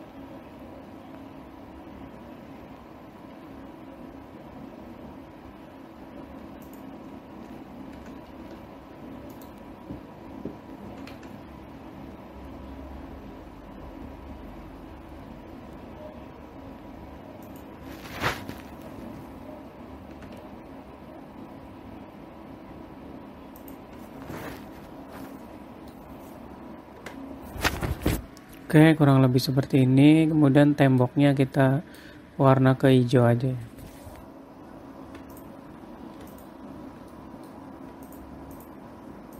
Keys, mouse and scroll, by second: 8.5 s, 11.5 s, 20.7 s, 25.7 middle click, 27.6 Tab, 30.4 middle click, 32.1 middle click, 35.7 Tab, 35.9 click, 36.9 shift+click, 37.7 middle click, 38.6 shift+click, 39.1 shift+click.